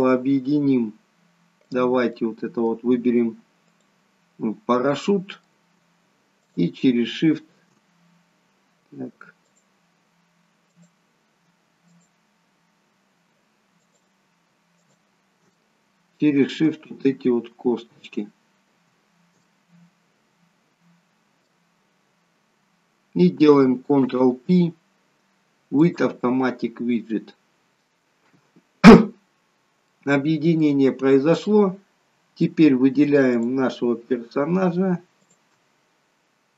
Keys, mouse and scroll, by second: 1.7 click, 2.1 middle click, 3.7 click, 5.1 middle click, 6.3 shift+click, 10.7 click, 11.9 shift+click, 13.8 shift+click, 14.8 shift+click, 15.6 middle click, 18.3-18.7 scroll down 4, 19.4 middle click, 24.1 ctrl+p, 29.3-29.6 scroll up 3, 29.8 middle click, 31.1 scroll down 1, 31.5 middle click, 33.2 click, 35.3 shift+click.